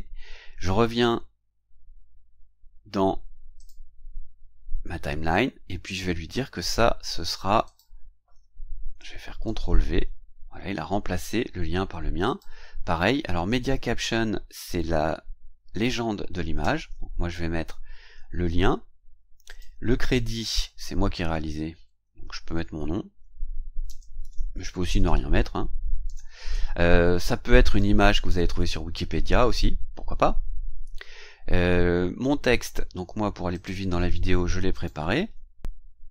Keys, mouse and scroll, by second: 3.6 click, 7.6 click, 9.4 ctrl+v, 12.2 click, 16.6 ctrl+v, 19.4 click, 21.7 Delete, 23.2-26.0 typing, 27.6 click, 33.5 click, 34.7 click, 35.6 ctrl+a.